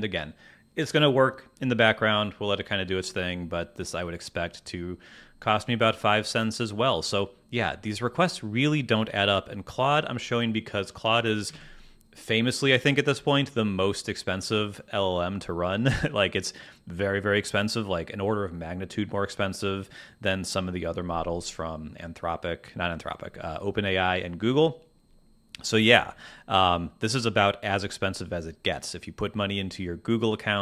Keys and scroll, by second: 11.4 super+Tab.